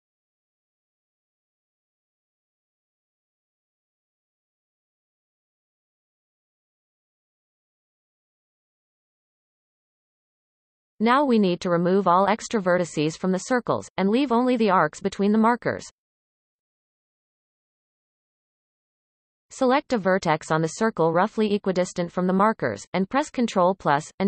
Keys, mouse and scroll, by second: 0.0 click, 0.2-2.5 typing, 1.2 ctrl+z, 2.2 click, 2.2 scroll down 7, 2.9-3.6 scroll down 13, 3.6 alt+a, 3.7 alt+shift+click, 4.7 shift+middle click, 4.8-5.1 scroll up 2, 6.7-10.0 shift+middle drag, 10.0 scroll up 3, 10.5-11.1 shift+middle drag, 11.3-11.8 scroll up 2, 11.8 Tab, 12.2 scroll up 3, 12.5 Tab, 13.7 alt+a, 20.7 ctrl+z, 21.0-24.2 ctrl+KP_Add.